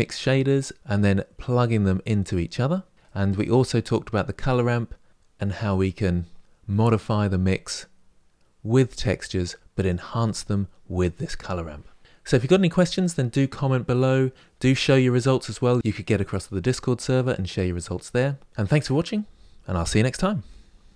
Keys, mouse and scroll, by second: 3.5 click, 8.5 click, 9.5 click.